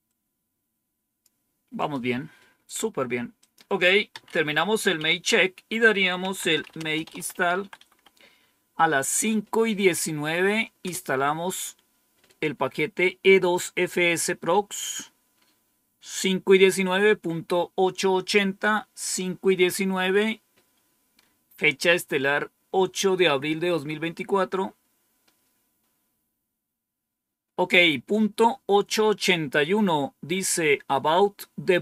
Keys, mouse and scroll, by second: 0.0-1.2 drag, 1.7 click, 3.3 click, 4.0 Home, 4.2 Up, 4.9 End, 5.9-8.3 typing, 10.7 Return.